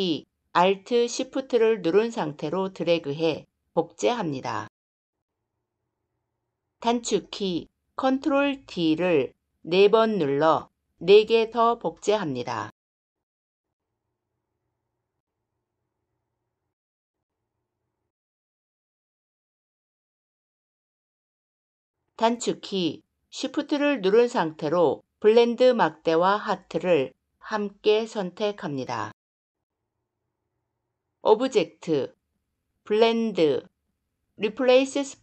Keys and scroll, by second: 7.8 ctrl+d.